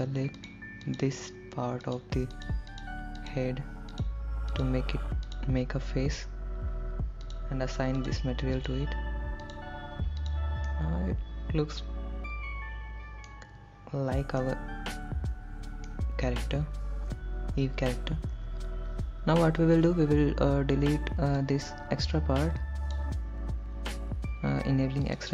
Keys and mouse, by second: 0.1 shift+click, 0.6 shift+click, 1.1 shift+click, 2.2 shift+click, 2.7 shift+click, 3.0 shift+click, 3.5 shift+click, 5.6 shift+click, 7.5 click, 8.2 click, 8.8 click, 9.9 click, 10.4 click, 10.9-13.5 middle drag, 14.6-16.2 middle drag, 18.6 KP_1, 21.8-23.2 drag.